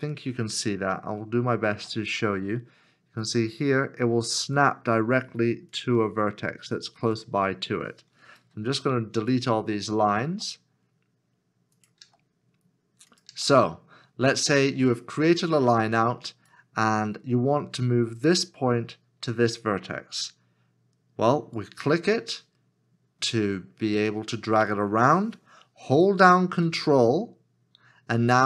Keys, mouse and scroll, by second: 1.0 shift+middle click, 8.4 x, 10.2 x, 12.0 x, 13.6 scroll down 1, 14.5-16.6 scroll down 1, 26.7 scroll up 1, 26.8 ctrl+click.